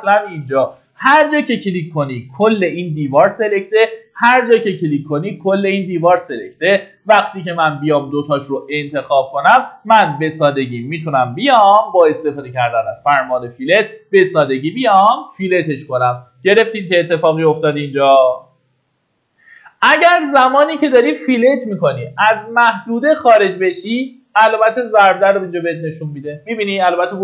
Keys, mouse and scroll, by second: 2.5 click, 8.1 Escape, 10.4 middle click, 10.7 typing, 12.5 click, 20.1-21.1 scroll down 1.